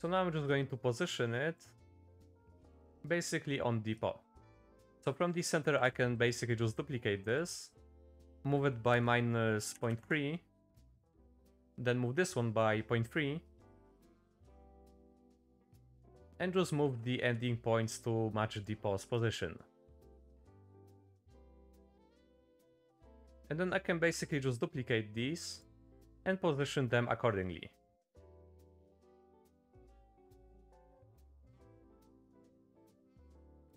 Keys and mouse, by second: 0.5-1.6 drag, 2.2 click, 2.7 click, 3.2 click, 4.3 middle click, 4.9 ctrl+z, 4.9 shift+d, 5.8 shift+d, 8.3-10.0 drag, 11.2 click, 11.7 shift+middle click, 12.3 click, 13.5-14.6 drag, 16.3 middle click, 16.8 s, 19.2 click, 20.0 click, 20.7 click, 21.1 middle click, 21.6 click, 22.2 middle click, 22.6 middle click, 22.9 shift+middle click, 23.2 middle click, 23.3 middle click, 24.1 shift+d, 25.9 middle click, 27.0 shift+click, 28.0 click, 29.1 middle click, 29.9 click, 30.6 middle click, 31.1 click, 31.7 click, 32.2 middle click, 32.6 click, 33.5 click, 33.6 click.